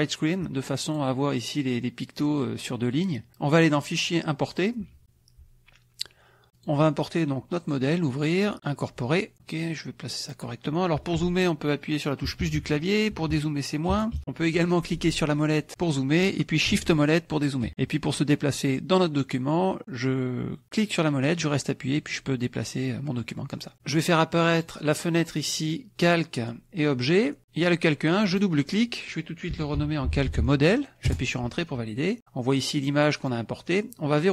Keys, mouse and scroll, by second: 1.0 click, 3.6 click, 4.5 click, 6.5 click, 7.6 click, 8.6 click, 9.3-10.6 drag, 12.2 KP_Add, 13.2 KP_Subtract, 14.2 KP_Subtract, 15.0 middle click, 15.5 click, 16.9 shift+click, 21.4-23.8 drag, 24.6 click, 25.6 click, 28.2 click, 29.5-30.7 typing, 31.5 Return, 32.8 click.